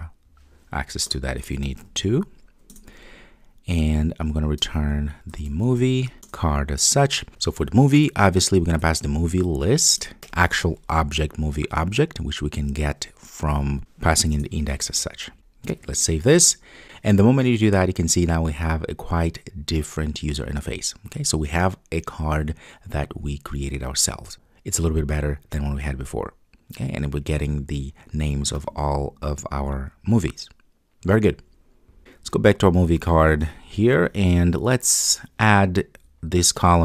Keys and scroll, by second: 3.0 Return, 6.2 Return, 10.0 Return, 14.3 Return, 15.3 super+s, 33.6 super+b.